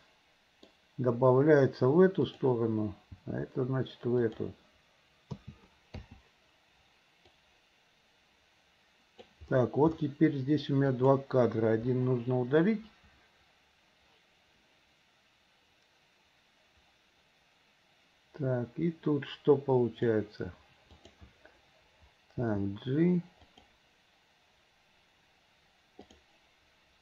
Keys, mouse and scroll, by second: 0.0 middle click, 2.3 click, 4.2 g, 5.4 a, 6.4 i, 7.4-9.4 drag, 10.9 click, 11.9 Delete, 12.7-20.2 drag, 21.0 click, 23.5 g, 26.1 click.